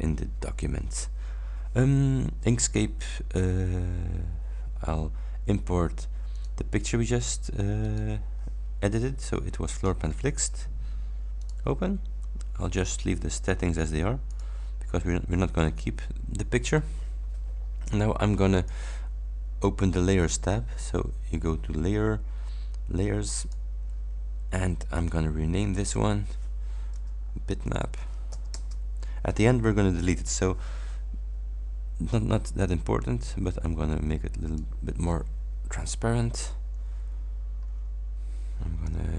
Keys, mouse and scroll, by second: 6.4 click, 7.9 click, 9.9 click, 11.5 click, 14.3 click, 18.6 click, 23.5 click, 25.0 click, 25.7 click, 27.4-28.8 typing, 32.7-34.9 drag, 36.2 ctrl+scroll down 2, 37.3 scroll up 2.